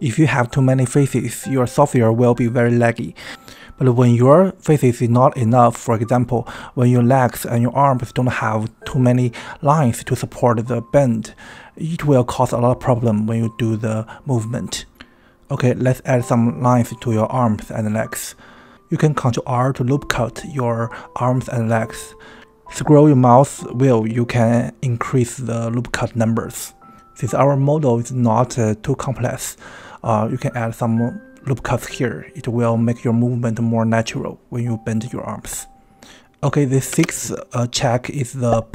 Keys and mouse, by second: 0.2 click, 0.8 Tab, 7.3 shift+middle click, 11.6 ctrl+r, 17.4 ctrl+r, 21.3 shift+middle click, 26.4 ctrl+r, 26.8 click, 27.3 ctrl+r, 27.8 ctrl+r, 28.4 ctrl+r, 29.2 ctrl+r, 29.9 ctrl+r, 31.3 Tab, 32.6 Tab, 33.6 middle click, 34.3 KP_1, 35.3 ctrl+r, 37.1 Tab, 37.7 shift+middle click.